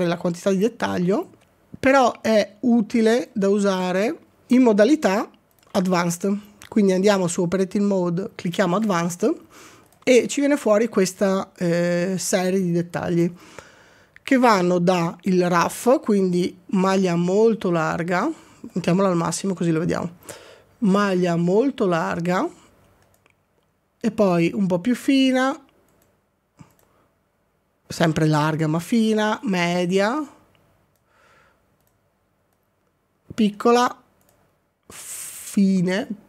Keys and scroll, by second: 4.8 z.